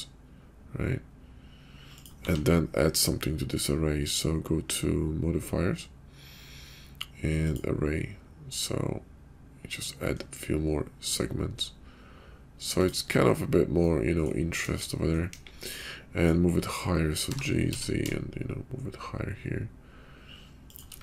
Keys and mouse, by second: 2.1 q, 13.9-14.3 middle drag, 14.5 KP_5, 15.3 KP_5, 15.7-16.3 drag, 17.1 g.